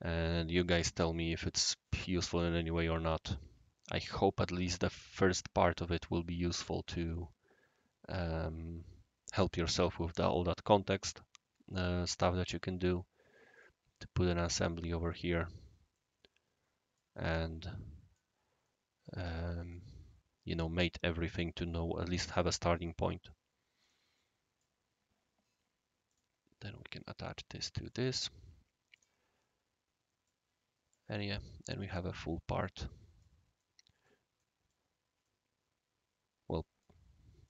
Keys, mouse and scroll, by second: 13.5 click, 14.6-15.1 right drag, 15.3-15.9 scroll down 1, 15.9-17.0 right drag, 17.3 click, 18.6-19.1 middle drag, 19.3-19.7 right drag, 22.8 middle drag, 23.8 click, 24.1-24.6 right drag, 26.0 click, 26.6-27.2 right drag, 27.8 click, 28.9 click, 29.3 scroll down 1, 30.2 click, 31.2-33.2 right drag, 33.5 scroll down 1, 33.5 scroll up 1, 33.6-34.1 middle drag, 34.4-34.7 middle drag, 35.2-36.8 right drag.